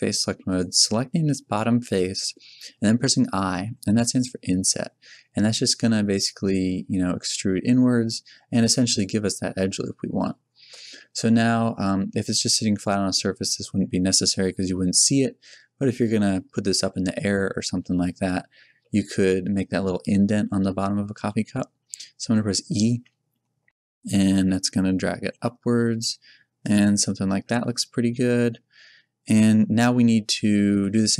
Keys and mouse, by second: 1.1-2.2 middle drag, 3.6 i, 9.0 click, 9.6-15.0 middle drag, 16.3-22.9 middle drag, 22.9 e, 26.8 Tab, 29.4 middle click.